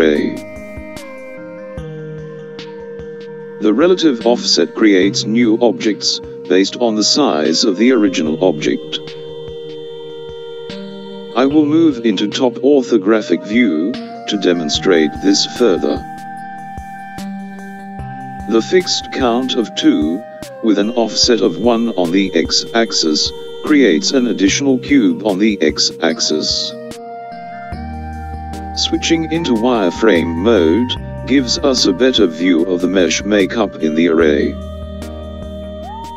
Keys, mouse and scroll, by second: 2.4 KP_7, 14.1 KP_5, 32.8 z.